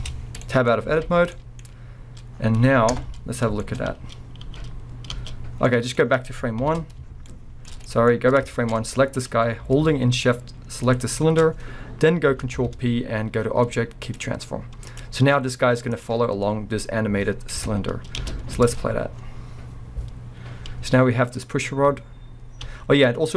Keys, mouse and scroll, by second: 0.0 Tab, 0.3 scroll down 2, 0.4-9.1 middle drag, 0.7 scroll up 2, 0.9 alt+a, 1.6-2.2 scroll up 2, 2.3 scroll down 1, 2.9 KP_0, 3.8 scroll up 1, 4.5 space, 5.1 space, 5.6 scroll down 2, 6.6 shift+Left, 8.1-8.5 scroll up 2, 8.8-9.1 scroll up 2, 9.1 click, 10.9 shift+click, 12.5 ctrl+p, 14.9 click, 15.9 click, 16.3-17.6 scroll down 1, 17.6 KP_0, 18.2 space, 18.5 scroll up 1, 18.7 alt+a, 22.7 space.